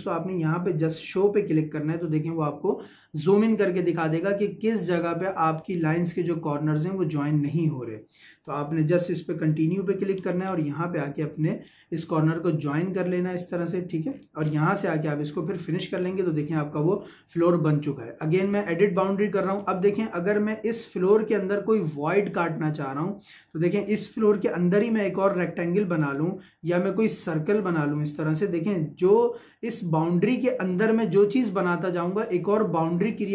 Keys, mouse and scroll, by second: 1.1 click, 9.0 click, 10.1-10.8 scroll up 1, 10.8 Escape, 11.2 click, 11.7-12.3 scroll up 1, 12.6-13.8 drag, 13.8 Escape, 14.1-14.4 scroll down 1, 15.3 click, 18.5 click, 19.5 scroll up 1, 19.7 middle click, 24.1 click, 26.4 Escape, 27.5 click, 29.2 Escape.